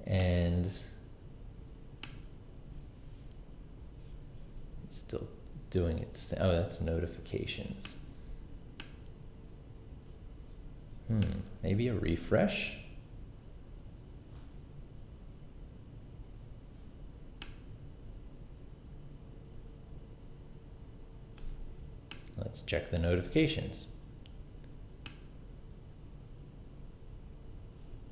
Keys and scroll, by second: 11.9 super+r.